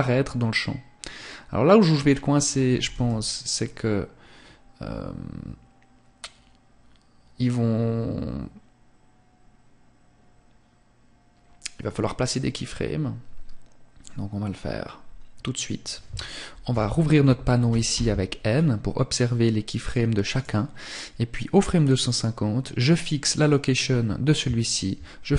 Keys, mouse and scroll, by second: 1.9 KP_0, 10.9 click, 15.7 t, 16.7 t, 17.4 scroll up 1, 18.7 scroll up 2, 18.9 right click, 19.5 right click.